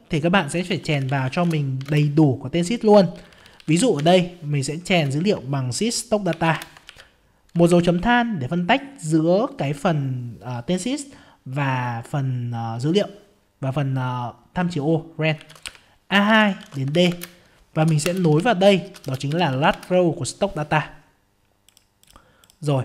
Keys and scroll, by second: 1.8 ctrl+space, 19.7 ctrl+space.